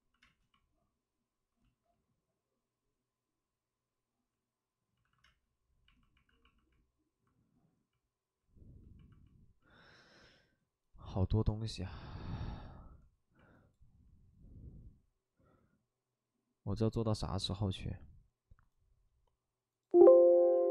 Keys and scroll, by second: 0.2 space, 5.0 alt+s, 5.2 space, 6.2 alt+s.